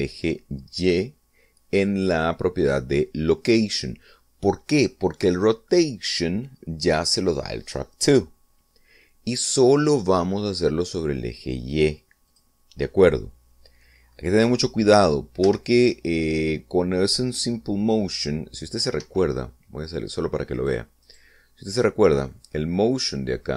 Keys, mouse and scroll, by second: 13.4 click, 16.5 Right, 20.1 Escape, 21.7 right click, 22.1 right click.